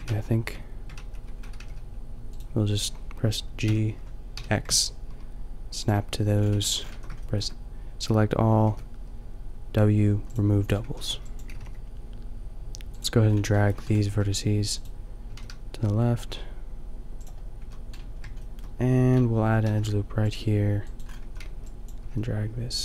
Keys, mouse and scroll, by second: 0.0 ctrl+z, 1.5 g, 3.6 g, 6.5 a, 7.0 a, 8.6 w, 10.8 a, 11.0 b, 11.5 g, 13.2 middle click, 14.0 g, 15.3-17.1 drag, 15.3 g, 17.6 a, 17.9 middle click, 18.5 scroll up 1, 19.6 ctrl+r, 21.0-22.8 drag, 21.2 a, 21.5 b, 22.0 g.